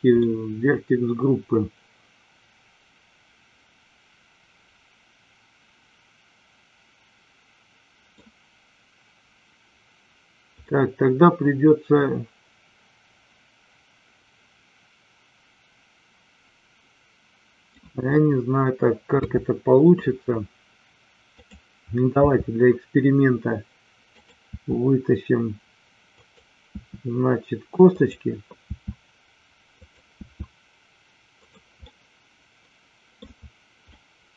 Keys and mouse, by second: 0.1-8.1 middle drag, 10.7-17.7 middle drag, 19.1 KP_3, 21.3 click, 22.1 e, 24.1 click, 24.5 e, 26.1 click, 26.6 e, 27.9 click, 28.6 e, 30.1 e, 31.9-33.1 middle drag, 33.9-34.3 middle drag.